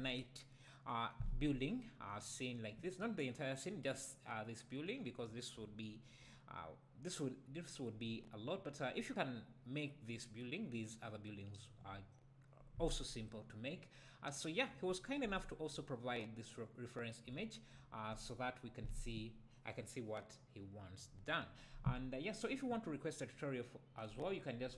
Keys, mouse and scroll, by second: 3.8-4.1 scroll up 1, 5.3 `, 14.4 `.